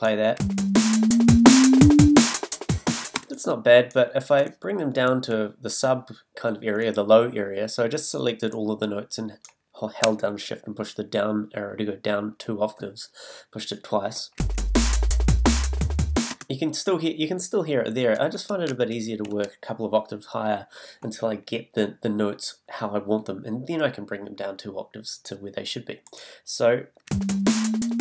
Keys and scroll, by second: 0.4 space, 3.1 space, 16.3 space, 27.1 space.